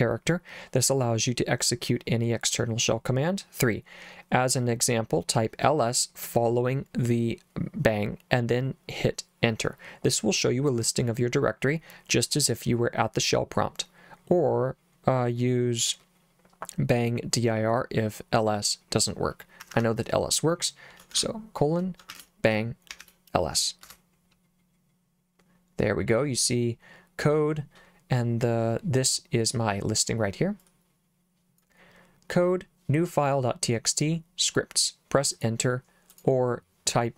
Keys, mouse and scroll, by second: 19.6 Escape, 21.1-23.5 typing, 23.8 Return, 30.6 click, 35.4 click, 36.1 click.